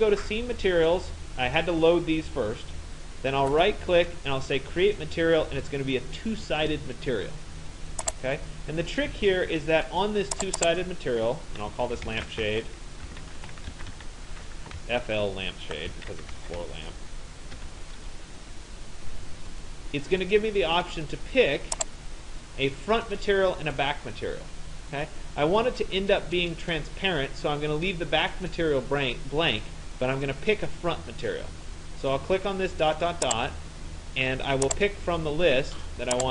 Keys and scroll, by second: 11.5-14.8 typing, 15.9-17.6 typing.